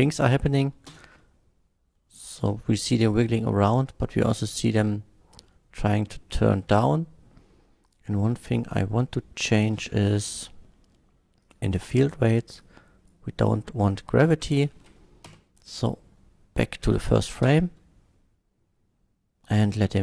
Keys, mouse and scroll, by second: 0.9 space, 2.0-3.8 middle drag, 5.4-6.2 middle drag, 6.6 space, 7.8 click, 9.4 click, 9.7 middle click, 11.4 click, 11.7 middle click, 12.6-13.1 drag, 13.5-14.1 middle drag, 15.3 shift+Left, 17.4 space.